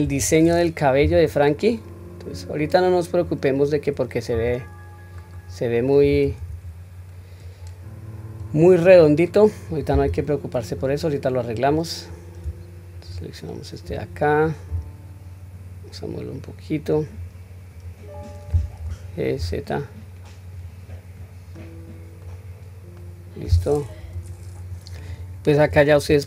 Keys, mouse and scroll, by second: 0.0 KP_1, 1.0 q, 2.3-3.2 drag, 4.3 s, 6.3 ctrl+z, 7.4-8.4 drag, 8.9 click, 10.0 q, 10.7 click, 11.5 click, 12.9-13.3 shift+drag, 14.7 s, 17.7 click, 18.8 g, 21.2-21.5 scroll down 1, 21.5 middle click, 22.4 scroll down 1, 23.0 middle click, 23.0 scroll down 1, 24.0 KP_3.